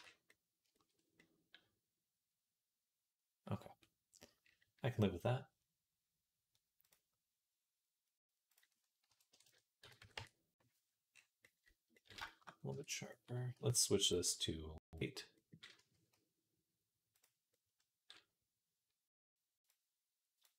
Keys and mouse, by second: 0.2 shift+right click, 1.0-2.1 right drag, 2.1 middle click, 2.8 right click, 3.3 right click, 3.8 right click, 4.0 middle click, 4.2-11.0 middle drag, 9.3 KP_0, 12.5 Tab, 17.4 a, 20.5 click, 20.5 middle click, 20.5 right click.